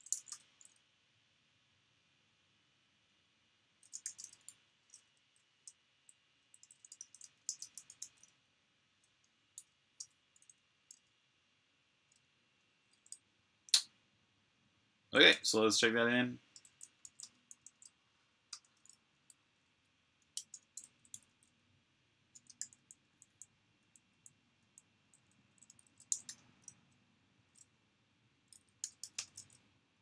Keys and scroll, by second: 0.0-0.4 typing, 3.5-4.3 typing, 5.5 BackSpace, 5.7 BackSpace, 5.8 BackSpace, 15.1 g, 16.4-17.9 typing, 20.2-21.0 typing, 22.4-26.5 typing, 28.1-30.0 typing.